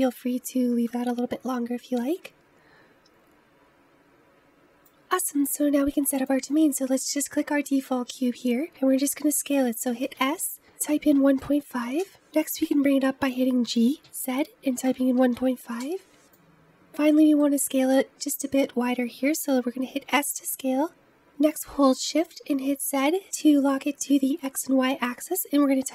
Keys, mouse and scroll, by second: 2.0-4.8 drag, 4.8 scroll up 1, 5.0-6.1 scroll down 1, 6.1 click, 10.1 s, 13.6 g, 16.1-17.0 scroll down 1, 17.0-19.9 middle drag, 19.9 s.